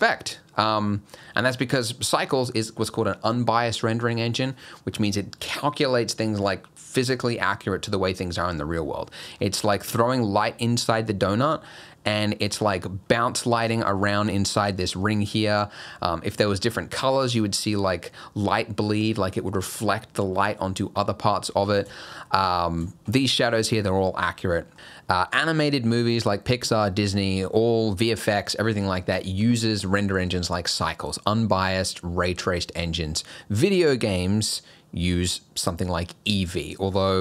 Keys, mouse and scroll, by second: 0.9 middle click, 1.3 scroll up 1, 9.0 scroll up 1, 9.4 middle click, 9.7 scroll up 1, 11.3-11.7 scroll up 3, 12.3 shift+middle click, 15.7 scroll down 1, 21.7 scroll down 2, 22.0 shift+middle click, 22.3 middle click, 22.3 scroll up 1, 22.5 scroll down 1, 22.9 shift+middle click, 23.2-23.8 scroll up 3, 24.2 scroll down 3, 24.5 middle click.